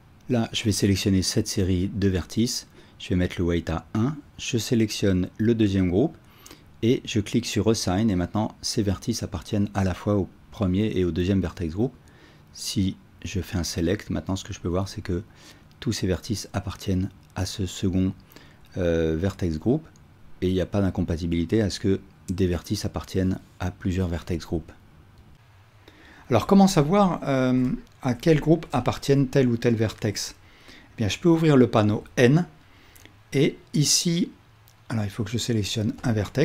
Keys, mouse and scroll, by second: 7.4-25.3 drag, 9.9 alt+a, 26.7-36.2 ctrl+alt+drag, 31.9 n.